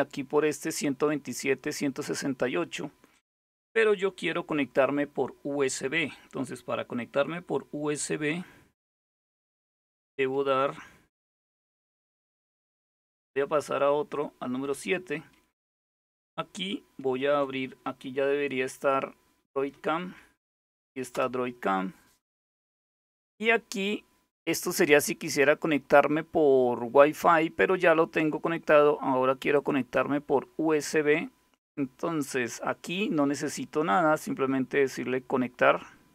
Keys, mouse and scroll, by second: 8.6 super+3, 14.3 super+7, 16.6 alt+super+d, 18.9-20.2 typing, 20.8 Return, 29.2 click, 29.6 click, 35.8 click.